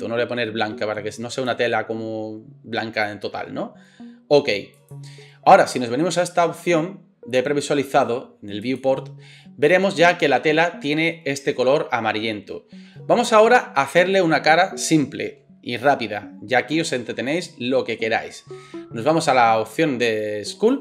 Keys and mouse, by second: 8.8-20.8 middle drag.